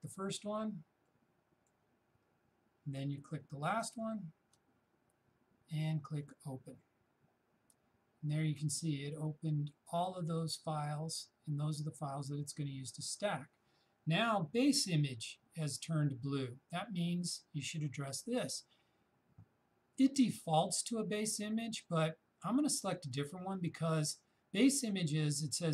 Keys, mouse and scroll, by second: 6.3 shift+click, 12.1-15.7 shift+drag.